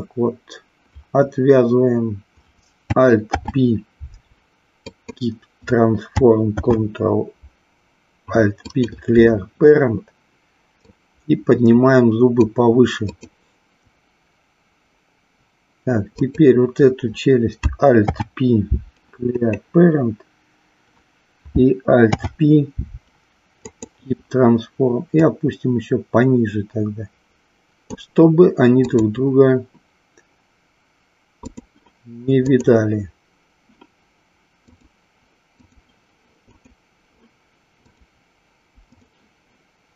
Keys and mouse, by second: 3.2 alt+p, 6.5 alt+p, 10.9-12.4 drag, 13.1 click, 16.1 click, 18.0 alt+p, 22.0 alt+p, 25.2-28.1 drag, 28.9-31.9 drag, 32.4 click, 34.6-35.7 drag, 36.5 click, 37.9-39.0 drag.